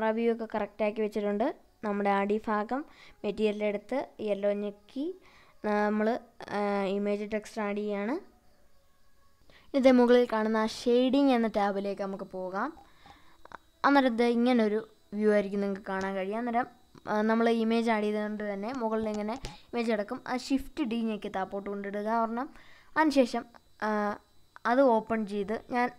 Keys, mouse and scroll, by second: 13.1 click, 15.4 shift+middle click, 15.4 shift+d.